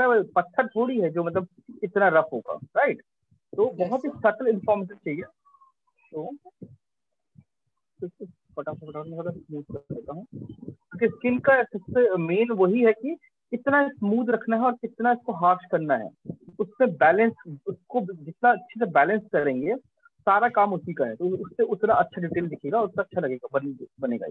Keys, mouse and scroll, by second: 9.1 click, 12.6 click, 13.2 click, 13.7 alt+click, 13.8 alt+click, 14.4 click, 18.6 click, 19.6 alt+click, 20.8 click, 22.0 click, 23.5 click.